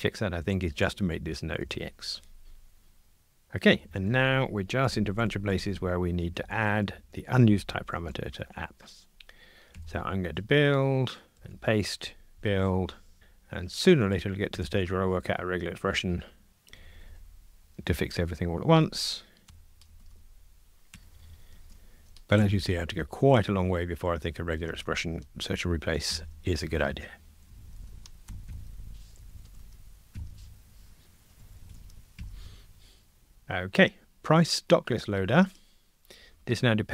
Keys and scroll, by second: 1.6 Return, 2.4 super+F9, 8.0 super+c, 11.4 super+v, 12.3 super+F9, 13.2 super+v, 14.5 super+F9, 18.7 super+v, 19.4 super+F9, 19.9 super+v, 20.9 super+F9, 22.4 super+F9, 24.7 super+v, 27.8 super+v, 28.3 super+v, 28.5 super+F9, 29.5 super+v, 30.1 super+F9, 31.7 super+v, 32.2 super+F9, 35.6 super+b.